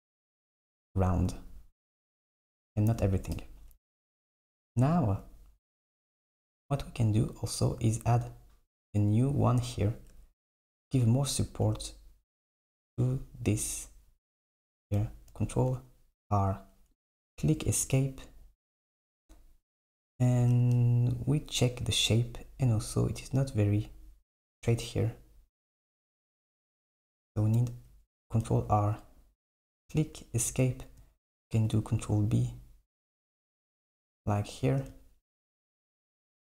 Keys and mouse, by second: 2.1 click, 3.4 KP_7, 4.9 Tab, 5.9 Tab, 9.7 Tab, 10.2 Tab, 10.6 Tab, 11.7 Tab, 15.3 ctrl+r, 20.6 Tab, 25.6 Tab, 28.5 ctrl+r, 31.6 ctrl+b, 34.7 Tab.